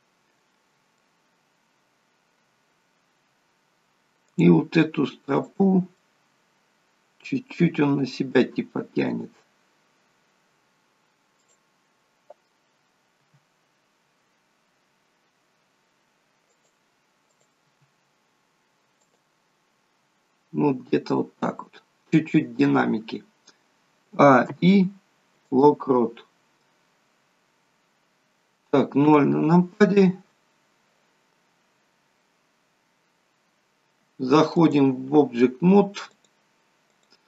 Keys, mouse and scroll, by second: 1.4 scroll down 2, 3.2 scroll up 4, 4.3 click, 5.4 shift+click, 6.0 middle click, 7.8 g, 11.4 click, 13.2 r, 17.3 click, 17.8 r, 20.1 scroll down 3, 22.8-23.9 scroll down 1, 23.9 scroll down 1, 24.1 a, 24.5 i, 27.2-27.6 scroll down 3, 29.1 KP_0, 30.1-30.5 scroll down 3, 34.6 click, 36.2 click.